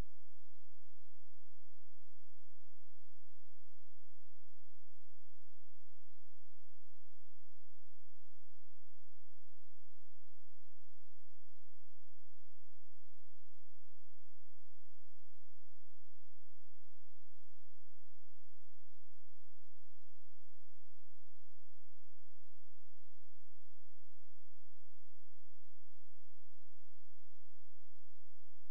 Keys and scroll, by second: 7.0 ctrl+a, 8.5 shift+c, 9.7 ctrl+space.